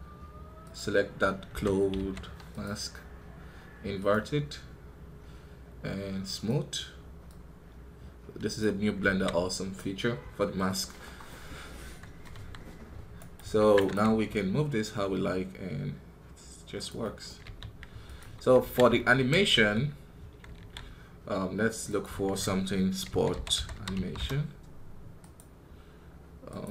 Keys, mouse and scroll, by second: 5.4-10.7 drag, 11.1-12.2 middle drag, 12.2 KP_1, 13.1 right click, 14.0 g, 16.9 middle click, 17.3 g, 18.1 KP_1, 19.5 alt+g, 19.9-20.5 scroll down 3, 20.5 alt+a, 24.1-26.7 drag.